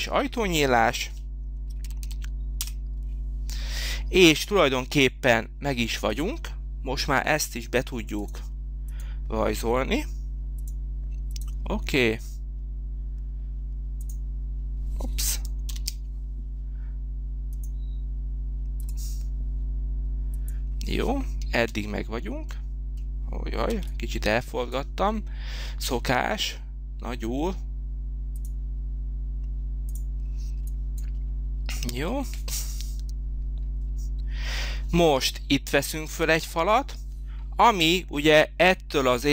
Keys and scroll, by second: 1.1 9, 1.8 0, 2.6 Return, 15.6 ctrl+z, 21.7 space, 23.8 h.